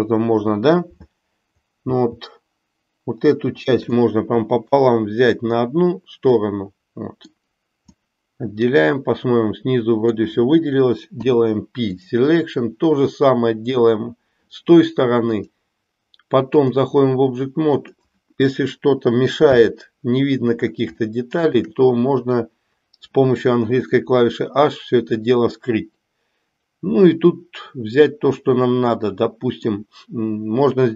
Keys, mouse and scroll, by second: 1.9 l, 3.9-4.9 middle drag, 6.5 middle click, 8.1-10.4 middle drag, 11.1 p, 15.4 click, 17.6 click, 19.5 h, 21.1 shift+middle click, 24.0-29.8 middle drag.